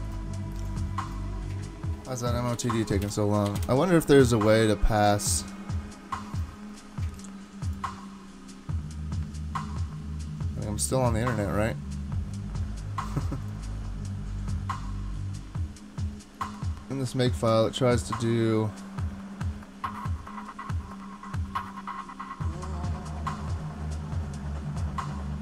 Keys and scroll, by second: 2.5 ctrl+c, 3.0 Return, 3.5 Up, 3.6 Return.